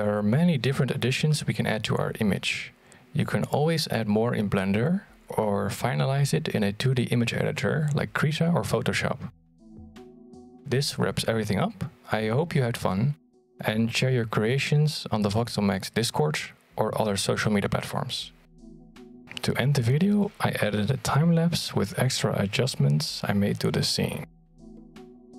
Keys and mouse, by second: 0.3 g, 0.3 r, 4.0 g, 7.3 click, 8.5-11.8 drag, 18.6 click, 20.0-21.9 drag, 22.4 g, 23.5 ctrl+z, 23.7 g, 24.6 r, 25.2 g.